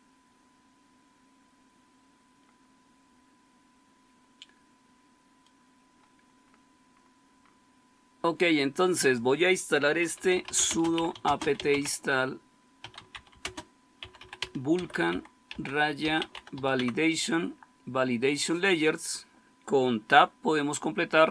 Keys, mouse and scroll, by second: 6.2-10.1 scroll down 1, 9.9-17.3 typing.